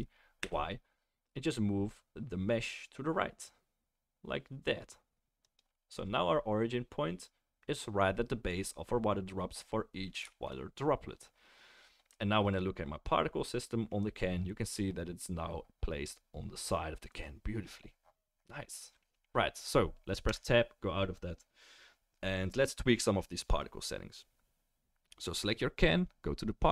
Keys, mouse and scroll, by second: 5.4-7.5 drag, 5.4-19.3 middle drag, 5.4-11.9 right drag, 20.3 Tab, 23.5 click.